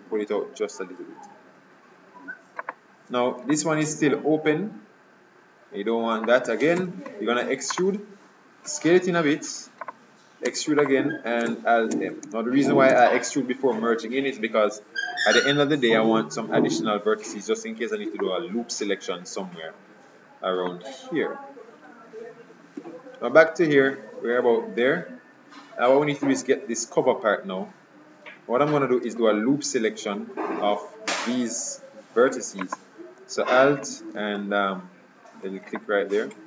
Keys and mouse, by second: 7.0 e, 8.9 s, 11.1 e, 12.2 alt+m, 15.5 KP_Decimal, 22.9 KP_3, 26.2-32.7 middle drag, 32.7-34.4 right drag, 34.4 click.